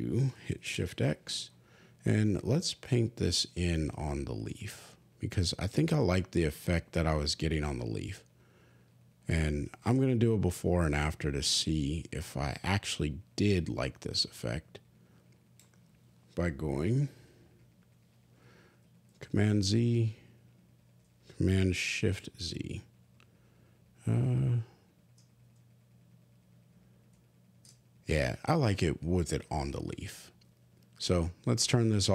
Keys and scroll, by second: 0.6 shift+x, 19.1 super+z, 21.9 shift+super+z, 25.4 shift+super+z, 26.2 super+z, 27.0 shift+super+z.